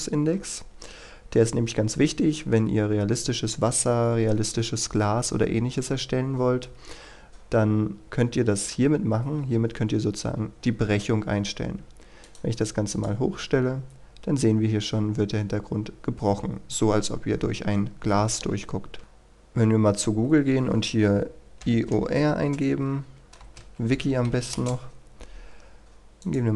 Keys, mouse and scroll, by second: 2.0-3.6 scroll down 1, 10.5-11.2 scroll up 1, 11.2-12.2 scroll down 1, 12.2 click, 13.4-14.5 scroll up 1, 19.0 middle click, 21.6 typing, 23.5-24.7 typing, 26.2 click.